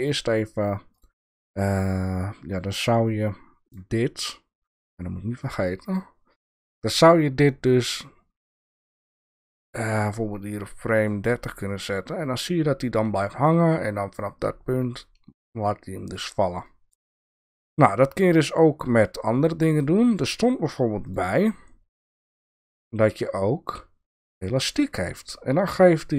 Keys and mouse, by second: 0.9 click, 2.7 click, 3.2-3.7 drag, 5.4 click, 5.8 click, 6.5 click, 7.8-11.1 drag, 11.7-16.1 drag, 16.6 click, 17.7-20.2 drag, 21.0 click, 22.1 click, 22.7-24.7 drag.